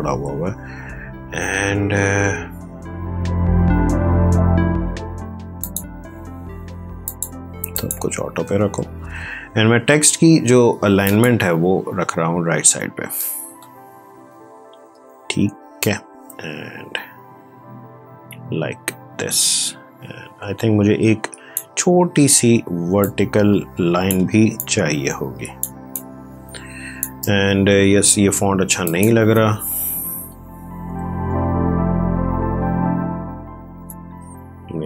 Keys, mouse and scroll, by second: 5.5 click, 10.9 click, 14.8 v, 15.7-24.2 drag, 24.2 ctrl+space, 24.5-28.8 drag, 30.4-31.4 typing.